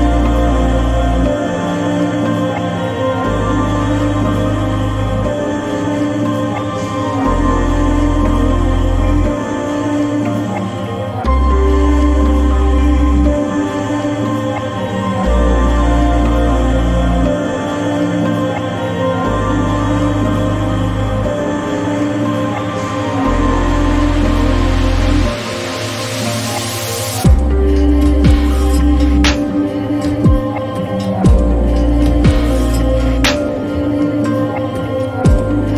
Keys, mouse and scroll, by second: 4.6 click, 7.3 click, 7.5-9.7 alt+right drag, 9.7-15.6 drag, 17.6-35.7 drag.